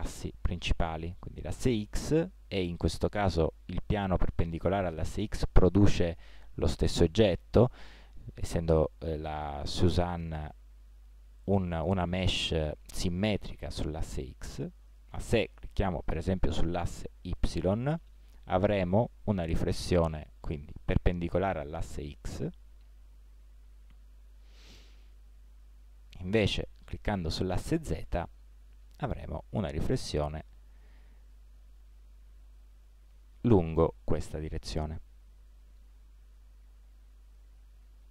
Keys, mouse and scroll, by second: 2.7-3.9 middle drag, 3.9 click, 17.4-19.0 middle drag, 26.4-29.2 drag, 29.2 middle click, 37.3-38.1 middle drag.